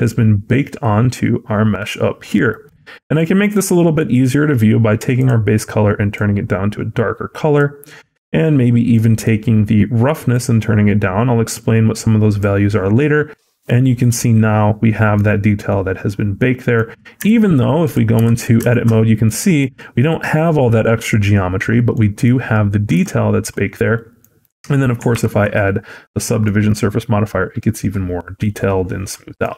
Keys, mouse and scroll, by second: 3.0 middle click, 4.1 scroll up 1, 5.0 click, 5.0 scroll up 6, 8.3-8.7 scroll down 1, 8.8 middle click, 10.2 click, 12.5 scroll down 1, 12.8 middle click, 15.2-15.9 scroll down 4, 15.5 middle click, 16.7-17.1 scroll up 5, 17.1 Tab, 17.7 click, 18.1 Tab, 18.6 shift+middle click, 18.8 scroll up 2, 19.1 middle click, 21.5-22.7 scroll down 3, 21.8 middle click, 22.8 Tab, 23.1 scroll down 1, 23.8 middle click, 24.3 click, 25.0 ctrl+2, 25.5 scroll up 1, 26.3 scroll up 3, 26.3 middle click.